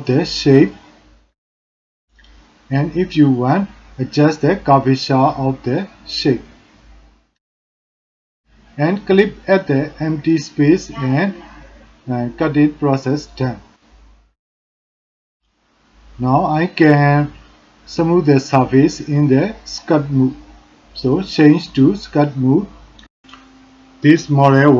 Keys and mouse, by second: 13.9 middle click, 15.2 shift+drag, 15.6-16.1 middle drag, 16.3 shift+click, 17.8 middle click, 18.5 middle click, 19.5 shift+click, 19.9-20.5 drag, 21.1 shift+click, 21.5-22.0 drag, 23.4-24.3 drag.